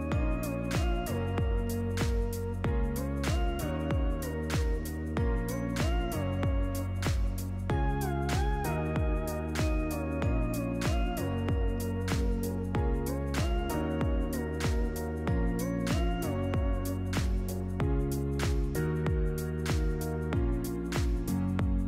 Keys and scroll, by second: 0.0-0.7 typing, 12.4 ctrl+v, 19.0 ctrl++.